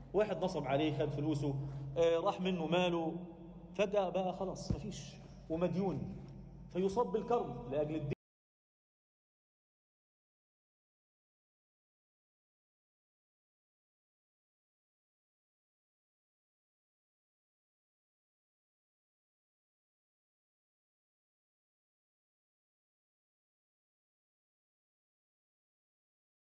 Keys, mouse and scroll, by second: 0.1-1.0 right drag, 1.4 click, 3.0 right click, 3.2 scroll down 1, 3.5 alt+shift+middle drag, 3.9-4.5 alt+scroll down 3, 4.0 alt+a, 4.6 ctrl+alt+middle click, 4.9-6.7 alt+middle drag, 7.0 middle click, 8.0 F9, 9.7 scroll up 1, 10.0 a, 11.8 click, 13.2 a, 13.6 s, 16.1 s, 18.5 g, 19.9 z, 20.1 scroll down 1, 20.3 middle click, 21.9 g, 23.3-23.6 scroll down 2, 23.6 Tab, 25.8-26.4 right drag.